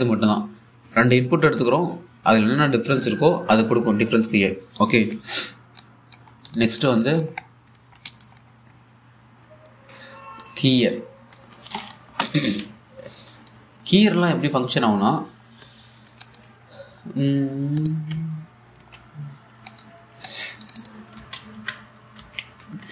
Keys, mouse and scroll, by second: 6.4 click, 6.9 scroll down 1, 7.2 alt+click, 8.1-8.6 alt+scroll down 1, 8.7 alt+click, 9.1-10.2 scroll up 1, 10.5-11.1 scroll down 1, 11.1 click, 13.0-13.9 scroll up 1, 14.1-15.6 drag, 16.7 scroll down 1, 16.9 alt+click, 17.3-18.2 scroll up 1, 18.4 click, 18.8 1, 19.9-20.6 typing, 20.3 alt+click, 20.8 scroll down 1, 20.9 alt+click, 21.8 Tab, 22.2-22.9 typing.